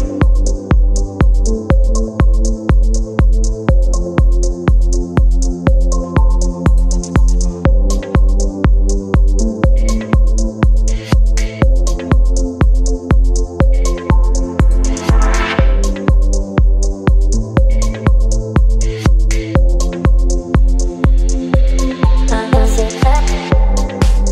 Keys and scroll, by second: 11.4 KP_1, 11.5 KP_2.